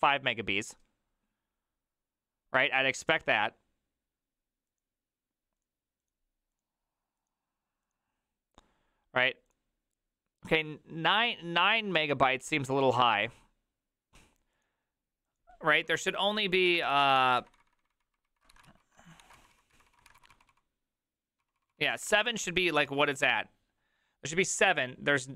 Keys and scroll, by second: 16.6 alt+{, 16.6 ctrl+a, 16.8 1, 16.9 ctrl+c, 17.1 ctrl+:, 17.1 w, 17.2 Return, 17.4 ctrl+d, 17.6 ctrl+d, 17.8 ctrl+d, 18.5 ctrl+d, 18.5-22.7 typing, 18.7 ctrl+u, 19.2 ctrl+d, 23.0 alt+{, 23.3 alt+[.